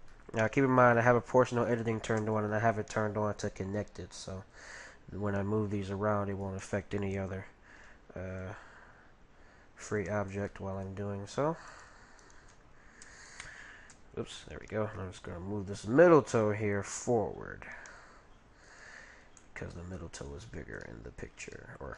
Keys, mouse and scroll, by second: 0.1-1.8 middle drag, 1.2-3.0 right drag, 3.2 right click, 3.4 g, 5.4-6.5 middle drag, 6.4 right click, 6.7 middle click, 6.7-8.1 right drag, 8.4 g, 10.5-12.2 middle drag, 11.7-13.9 right drag, 15.2 g, 19.0-21.9 middle drag.